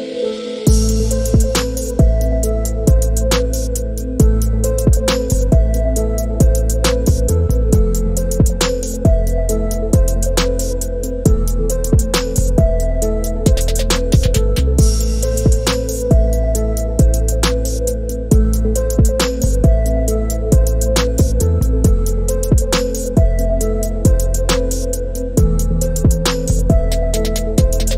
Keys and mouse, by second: 1.6-2.7 drag, 5.0 click, 9.2-11.1 drag, 15.2 click, 18.7 middle click, 21.6 click, 23.7 middle click.